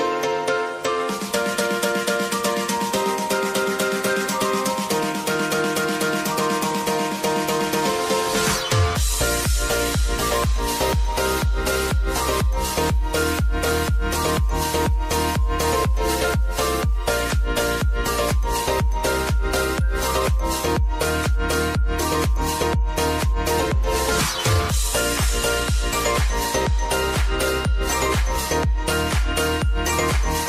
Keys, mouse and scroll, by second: 0.3 click, 2.2 ctrl+a, 2.6 click, 6.3 ctrl+0, 7.5-10.5 drag, 11.0 space, 13.4 click, 14.3 space, 22.2 space, 22.6 click, 23.2 space, 28.5 space.